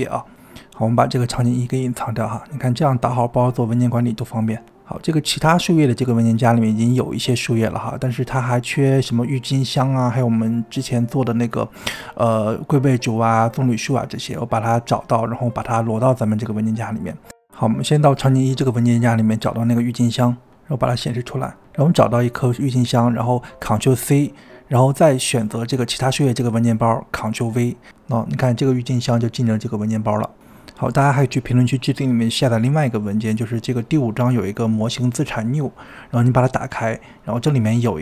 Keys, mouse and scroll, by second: 2.0 click, 3.3-7.8 middle drag, 7.8 click, 8.5 click, 9.2-10.1 scroll up 9, 10.2-14.5 middle drag, 14.5 click, 15.6 click, 17.2 click, 17.8-18.3 scroll down 2, 18.3 click, 18.6-19.3 scroll down 1, 19.4 scroll up 2, 19.6-20.3 scroll down 2, 20.8 click, 22.2 click, 25.2 ctrl+c, 26.0-26.8 scroll down 2, 26.8 click, 27.5 ctrl+v, 28.7 click, 29.3-30.4 scroll down 5, 30.4-30.8 scroll down 1, 30.8 g, 31.8-32.2 scroll up 11, 32.2 scroll down 3, 32.4 click, 32.5 scroll up 4, 33.1 click, 33.2 KP_1, 33.4 g.